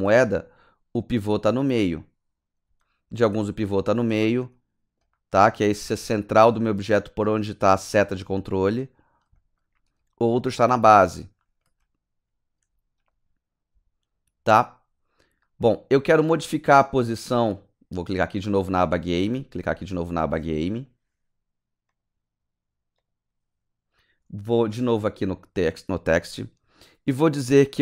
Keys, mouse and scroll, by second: 0.2 click, 2.8 alt+right click, 3.3 alt+middle click, 4.0 alt+right click, 4.5 alt+click, 5.1 alt+right click, 5.6 alt+click, 6.3 alt+right click, 8.3 alt+middle click, 8.7 right click, 9.4 middle click, 9.9 click, 10.8 middle click, 11.4 right click, 11.8 click, 14.5 alt+middle click, 15.4 alt+right click, 20.0 click, 21.9 click, 23.0 click, 24.2-24.6 scroll down 3, 25.3 click.